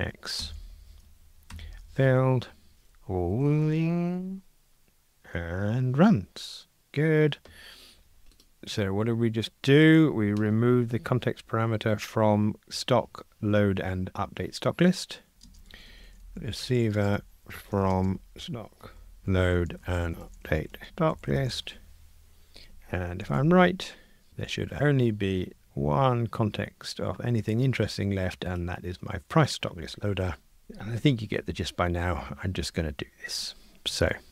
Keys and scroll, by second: 1.5 super+F9, 3.3 ctrl+r, 10.4 super+d, 23.3 shift+super+f.